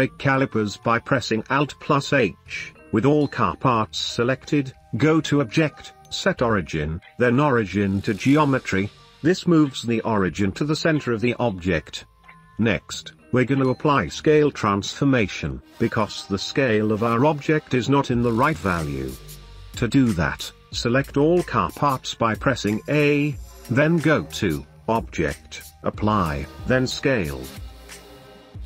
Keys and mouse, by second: 1.8 alt+h, 3.3-4.0 middle drag, 4.6-5.0 middle drag, 6.0-8.3 middle drag, 9.6-11.3 middle drag, 13.0 middle drag, 13.3-13.8 drag, 14.6 n, 16.2 click, 23.4-26.9 drag.